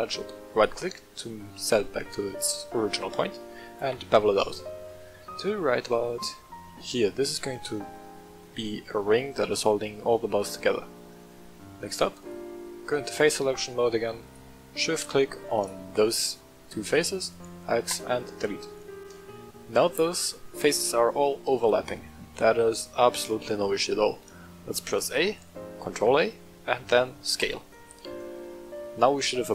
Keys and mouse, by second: 0.5 click, 3.7 ctrl+b, 6.8 click, 8.4 middle click, 9.9-10.7 middle drag, 11.2 middle click, 12.2 click, 14.2 shift+click, 14.9 middle click, 15.5 shift+click, 16.0 middle click, 17.1 x, 18.4 Tab, 18.9 middle click, 21.6 middle click, 22.3-22.7 shift+middle drag, 24.1 middle click, 24.9 a, 25.8 ctrl+a, 28.0 click.